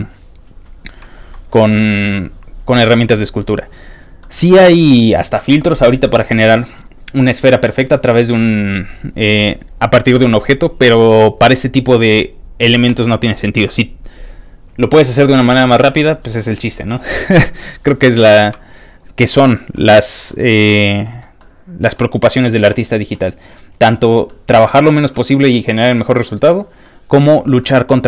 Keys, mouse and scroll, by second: 1.0 ctrl+middle click, 1.1 ctrl+scroll down 1, 1.1 ctrl+middle click, 1.7-2.7 ctrl+middle drag, 1.8-2.7 scroll down 1, 4.2 ctrl+middle click, 4.9 ctrl+middle click, 18.4-19.0 scroll down 4, 19.3-20.2 scroll down 2, 19.7 ctrl+middle click, 20.7 ctrl+middle click, 21.4 ctrl+middle click, 22.9 scroll down 1, 23.1 ctrl+middle click, 24.2 middle click, 25.5 middle click, 26.2 middle click, 27.6 middle click.